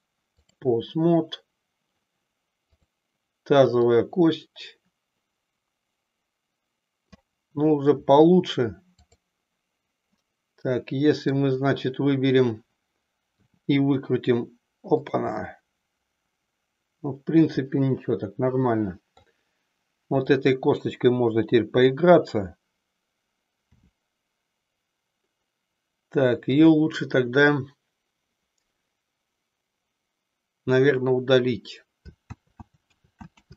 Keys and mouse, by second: 2.7 click, 3.9-7.4 drag, 10.3-11.4 middle drag, 13.4 r, 15.4-19.4 middle drag, 23.6 r, 26.6 click, 32.5 ctrl+z, 33.1 ctrl+z.